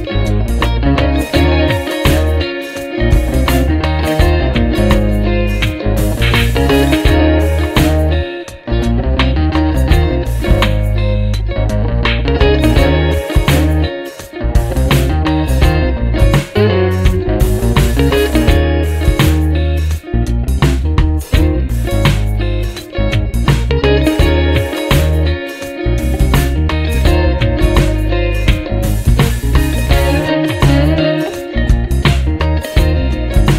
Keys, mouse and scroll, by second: 0.6-2.9 drag, 3.7-5.2 drag, 6.3 click, 8.2 click, 10.2 click, 10.7 click, 11.7 space, 15.1 click, 16.8 ctrl+d, 20.5-21.2 drag, 21.4 click, 22.2-23.5 drag, 23.8-26.5 drag, 26.7 click, 27.3 click, 27.9-28.9 drag, 29.9 click, 30.5 click, 31.7 click, 32.9 ctrl+d, 33.4-33.5 ctrl+drag.